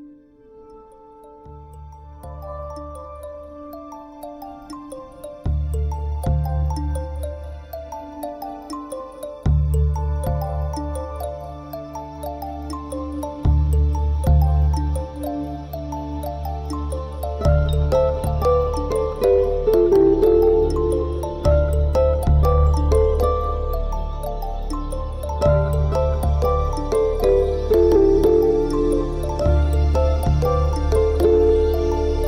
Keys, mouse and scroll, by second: 1.8 a, 2.0 middle click, 3.1 middle click, 4.5 click, 4.8 middle click, 8.2 click, 9.1 alt+shift+click, 9.5 middle click, 10.2 ctrl+z, 10.3 middle click, 11.3 alt+shift+click, 11.6 middle click, 12.3 z, 12.5 middle click, 15.1 middle click, 15.7 alt+shift+click, 16.2 alt+shift+click, 16.5 middle click, 20.7 alt+shift+click, 21.0 middle click, 22.0 ctrl+z, 22.2 shift+middle click, 22.5 middle click, 24.2 alt+shift+click, 24.5 middle click, 26.3 middle click, 27.1 alt+shift+click, 27.4 middle click, 29.0 middle click, 30.7 alt+shift+click, 31.0 middle click.